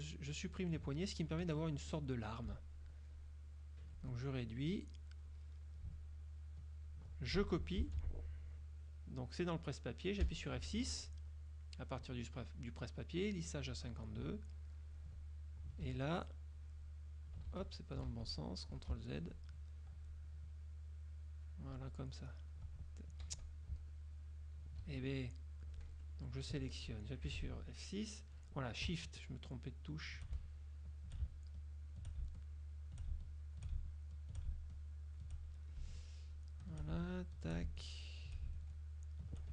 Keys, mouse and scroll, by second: 1.6 F1, 2.6-4.2 ctrl+drag, 4.4 ctrl+click, 6.0 ctrl+click, 7.9 ctrl+c, 10.3 F6, 14.8 ctrl+click, 15.9 ctrl+z, 16.6 click, 17.6 ctrl+z, 19.0 ctrl+z, 20.4-21.8 drag, 22.2 ctrl+click, 23.4 ctrl+z, 24.0 ctrl+click, 25.0 ctrl+z, 26.0 F2, 26.2 click, 27.4 F6, 29.4 shift+click, 30.7 shift+click, 31.6 shift+click, 32.6 shift+click, 33.4 shift+click, 34.0 shift+click, 34.8 shift+click, 36.4 shift+click, 37.2 shift+click, 38.0 shift+click, 38.9 shift+click.